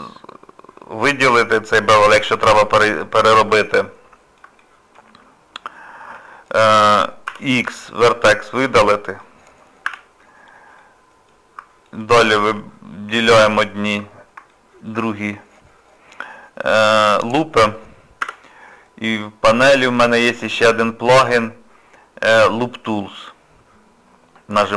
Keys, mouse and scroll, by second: 3.2 shift+middle click, 3.6 middle click, 4.6 shift+middle click, 7.3 x, 8.6 middle click, 9.8 2, 10.8 middle click, 11.8 alt+click, 13.4 alt+shift+click, 14.1 scroll down 1, 14.5 shift+middle click, 15.1 scroll down 1, 19.6 click.